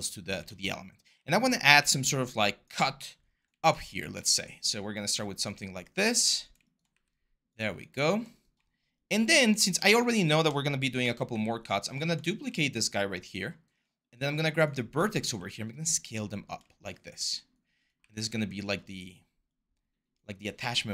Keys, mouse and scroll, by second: 0.8 r, 1.5 w, 3.6 r, 6.7 w, 10.8 ctrl+d, 11.0 w, 12.1 r, 15.0 r, 17.7 w.